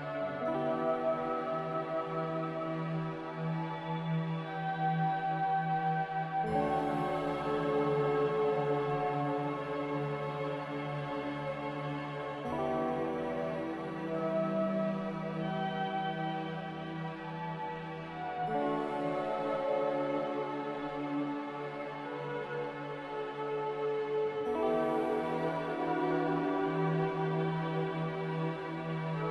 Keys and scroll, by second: 11.8 ctrl+z, 24.8 a.